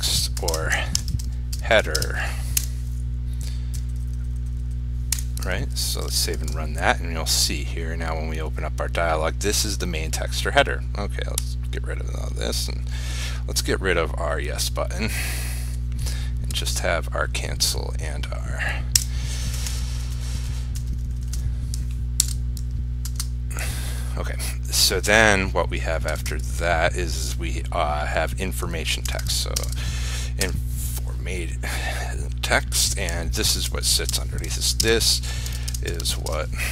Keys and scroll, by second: 6.0 ctrl+s, 6.6 ctrl+r, 22.4 ctrl+k, 29.8 ctrl+space.